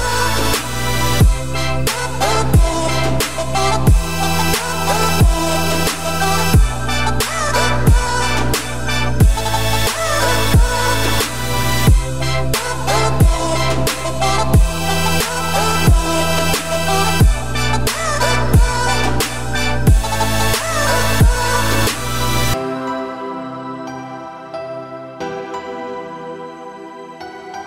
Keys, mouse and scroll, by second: 3.5 click, 4.0 click, 4.4 Tab, 4.7-5.2 scroll down 3, 5.2-5.6 scroll up 2, 5.6 `, 6.2-6.6 scroll up 2, 6.7 z, 7.5 click, 8.2 z, 9.1 click, 9.2 3, 9.4 click, 9.7 scroll down 4, 9.8 middle click, 10.1 `, 10.7 scroll down 1, 10.8 middle click, 11.2 `, 11.8 scroll down 1, 11.9 middle click, 12.2 `, 13.0 middle click, 13.5-13.9 scroll down 3, 13.9 e, 14.8 scroll down 1, 14.9-16.0 middle drag, 16.0 Tab, 16.4-17.3 middle drag, 17.3 ctrl+z, 17.6 ctrl+z, 18.0-18.9 scroll down 4, 18.3 middle click, 18.9 scroll up 2, 19.2 scroll down 1, 19.3 middle click, 19.7 Tab, 20.1-20.6 scroll down 1, 20.6-21.3 middle drag, 21.3 `, 22.0 scroll up 1, 22.1 Tab, 22.9 scroll up 2, 23.4 1, 24.2-27.3 shift+middle drag.